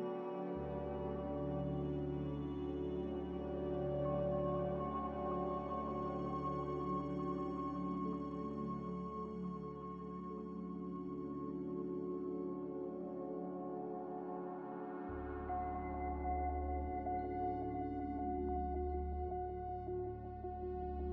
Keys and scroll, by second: 0.0-0.4 typing, 4.6 a, 6.4 1, 17.1 2.